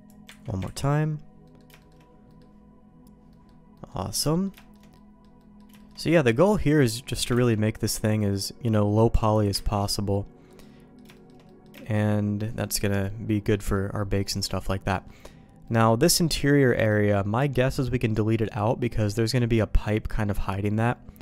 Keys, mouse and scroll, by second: 0.2 ctrl+q, 0.6 ctrl+x, 1.4 middle click, 1.7 shift+middle click, 2.2 middle click, 3.2 middle click, 3.7 middle click, 4.2 middle click, 4.5 shift+middle click, 4.9 middle click, 5.3 middle click, 5.7 shift+middle click, 6.3 middle click, 7.1 click, 7.3 ctrl+x, 7.7 middle click, 9.3 click, 9.7 ctrl+x, 10.1 middle click, 10.6 middle click, 11.1 shift+middle click, 11.4 middle click, 11.8 shift+middle click, 12.4 middle click, 13.5 middle click, 13.9 middle click, 14.9 middle click, 15.6 middle click, 16.6 middle click, 17.5 middle click, 19.1 click, 20.5 middle click.